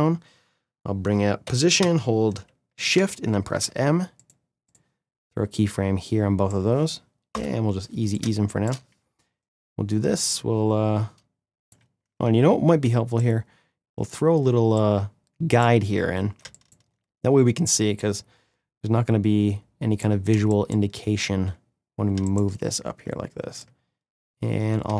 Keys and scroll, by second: 1.2 p, 2.7 shift+m, 7.0 F9, 9.5 ctrl+z, 11.5 ctrl+z, 13.8 space, 16.1 space, 20.1 space.